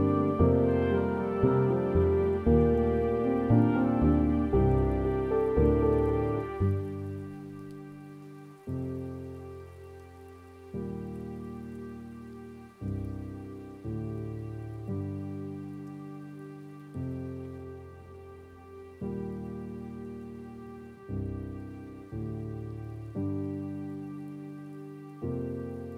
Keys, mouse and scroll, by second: 1.3 scroll up 9, 1.4-10.7 middle drag, 10.7 click, 11.4-11.9 scroll down 6, 11.9 middle click, 12.4-12.7 scroll up 3, 12.7 middle click, 13.1-13.8 scroll down 3, 13.8-15.2 middle drag, 15.2-18.6 drag, 18.6 scroll up 4, 18.8-20.8 middle drag, 20.8-21.2 scroll down 1, 21.2 middle click, 21.6-22.2 scroll down 3, 25.8 click.